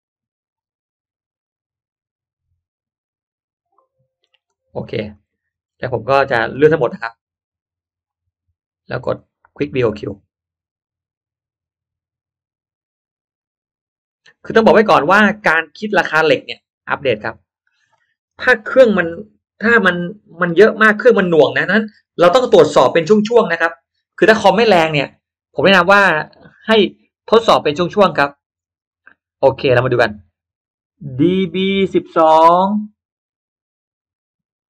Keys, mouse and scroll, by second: 4.1 click, 4.7 middle click, 5.1 click, 5.4 middle click, 6.4 space, 6.6-7.3 drag, 6.8 space, 9.1 click, 15.3 click, 17.1 click, 25.5 click, 27.6-28.2 drag, 28.5 scroll up 1, 28.7 click, 29.1 middle click.